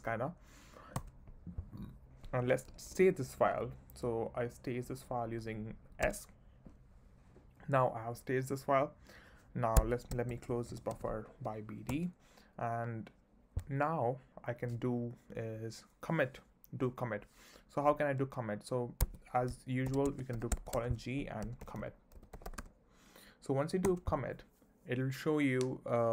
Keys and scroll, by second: 1.0 Return, 2.7 j, 6.0 s, 9.7 Escape, 10.0-11.4 typing, 11.9 Return, 19.0 Escape, 19.9-22.6 typing, 24.1 Return.